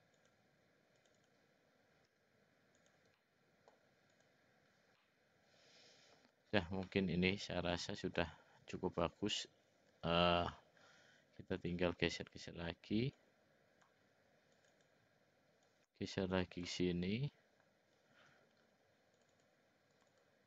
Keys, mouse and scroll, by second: 1.2 click, 2.0 s, 3.2 middle click, 4.1 click, 5.0-6.2 middle drag, 6.8-8.2 middle drag, 10.2 ctrl+r, 12.2 click, 12.5 click, 13.2 click, 14.8 click, 15.7 click, 18.3 ctrl+r, 20.1 click.